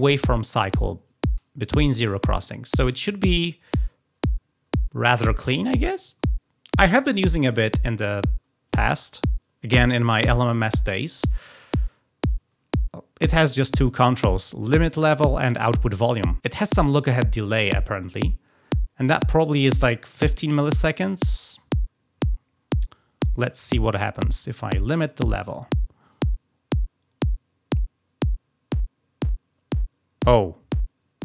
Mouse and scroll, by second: 26.0-31.2 drag.